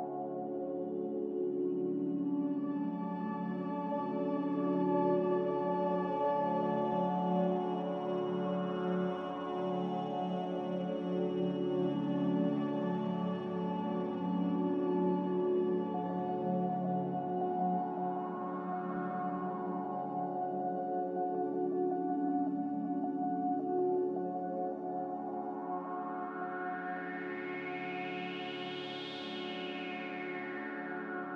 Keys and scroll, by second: 12.6 x, 15.0-15.4 typing, 19.3-20.0 typing, 20.1 Return, 21.8 1, 21.8 8, 21.8 0, 26.5 Return, 26.5 9, 26.5 0.